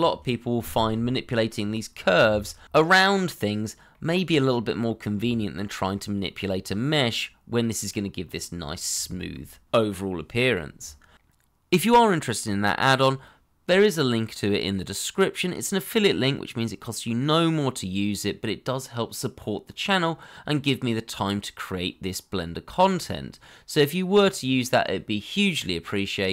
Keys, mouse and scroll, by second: 10.3-11.4 scroll up 1, 11.4 scroll down 1, 11.7 shift+middle click, 12.1 middle click, 14.6 scroll down 1, 15.0 shift+middle click, 18.3 scroll down 1, 18.7 shift+middle click.